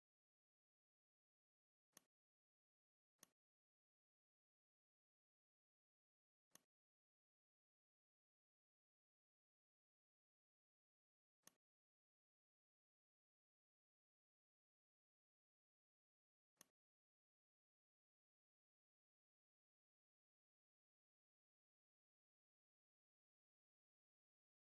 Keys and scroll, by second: 0.9 v, 10.6 ctrl+x, 12.8 ctrl+f.